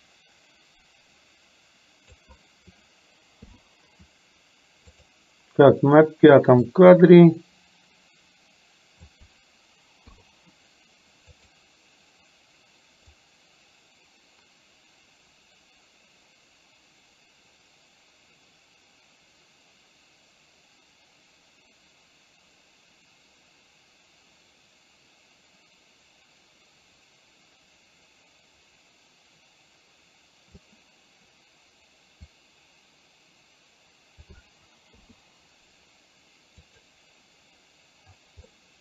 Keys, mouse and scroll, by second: 3.5 i, 5.1 click, 6.9-9.4 drag, 11.4 click, 13.2-30.7 drag, 32.4-34.4 drag, 35.1 i, 36.7 click, 38.6 middle click.